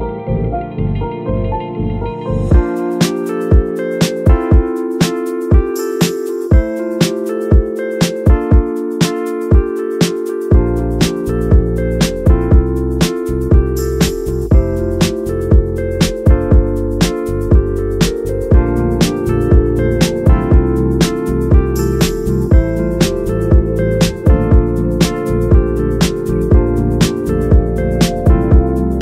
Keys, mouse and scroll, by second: 5.6 shift+click, 11.1 scroll down 5, 11.3 scroll up 5, 11.6 middle drag, 11.7 scroll down 4, 11.9 scroll up 5, 12.2 g, 13.5-13.9 middle drag, 13.9 scroll up 2, 14.1 middle drag, 14.3 scroll down 1, 14.6 click, 18.7 g, 19.9 right click, 24.4 shift+a, 25.1-29.0 drag.